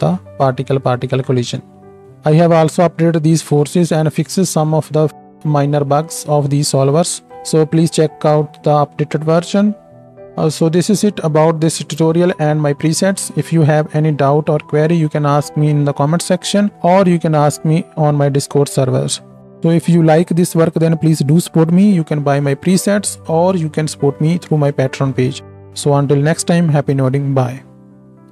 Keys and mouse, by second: 27.7 alt+middle click, 27.7 alt+right click.